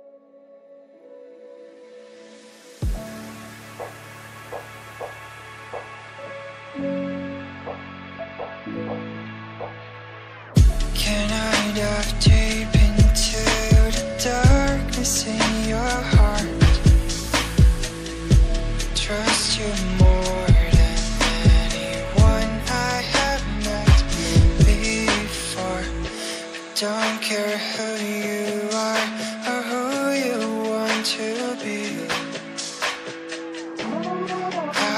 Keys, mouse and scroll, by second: 14.4 right click, 15.1 click, 17.1-17.5 scroll down 1, 17.5 click, 18.5 double click, 18.8 scroll up 1, 19.1 right click, 19.9 click, 20.3 double click, 21.0 click, 26.9 scroll down 1, 28.9 click, 34.8 click.